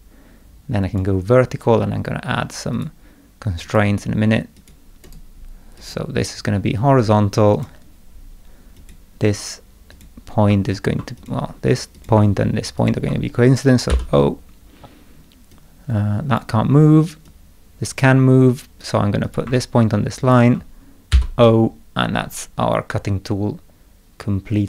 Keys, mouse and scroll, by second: 0.8 click, 2.7 click, 3.6 click, 4.5 click, 5.0 right click, 5.7 click, 7.5 click, 8.7 click, 9.9 click, 11.2 click, 11.9 click, 12.8 ctrl+click, 13.9 o, 15.5-16.3 drag, 17.2-18.0 drag, 19.2 click, 20.2 ctrl+click, 21.1 o.